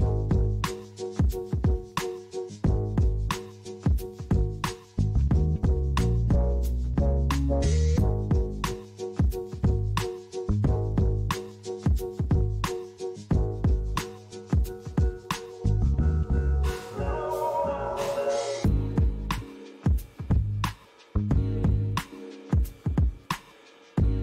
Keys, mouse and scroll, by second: 1.9 click, 2.5 middle click, 6.1 click, 7.4 click, 9.0 click, 9.6 middle click, 10.2 click, 10.6 middle click, 11.9 middle click, 14.0 middle click, 15.4 KP_1, 17.1 shift+a, 20.1 g, 20.6 z, 22.7 click, 23.7 middle click.